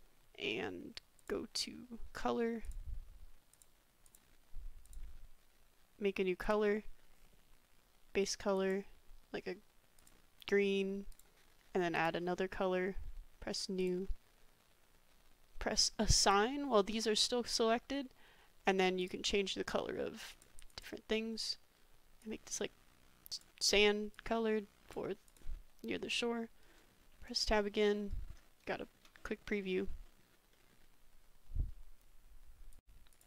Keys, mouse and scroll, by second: 2.6-3.6 drag, 4.1 click, 4.8 click, 6.4 click, 12.0 click, 13.8 click, 16.2 click, 19.0 click, 22.9-25.4 drag, 26.7 middle drag, 27.1 Tab, 27.5 drag, 27.9 click, 28.7 shift+middle drag, 29.1-30.2 drag, 30.5 click, 32.8 ctrl+z, 33.1 click.